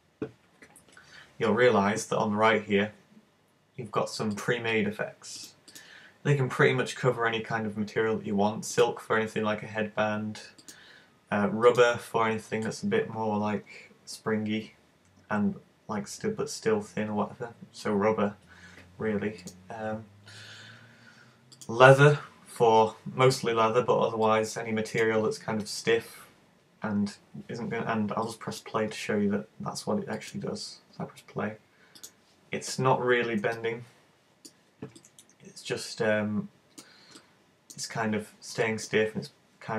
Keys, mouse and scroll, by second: 4.4 click, 5.4 click, 5.7 click, 10.6 click, 19.5 click, 22.6 scroll up 1, 24.3 click, 28.3 click, 30.2 click, 32.1 click, 33.6 middle click, 35.0 middle click, 37.2 middle click, 38.6 middle click.